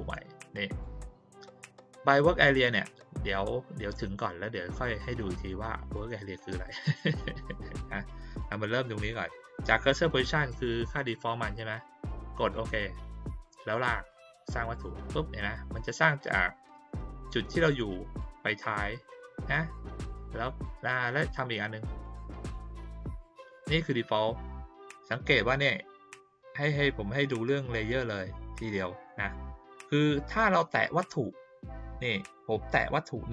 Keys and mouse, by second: 0.3-0.8 drag, 12.5 click, 14.0 click, 22.0 click.